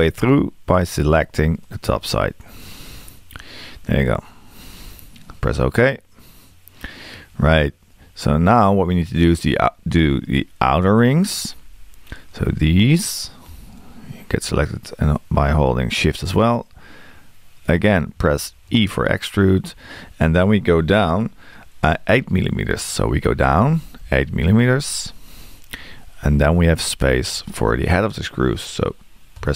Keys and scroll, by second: 23.6 space.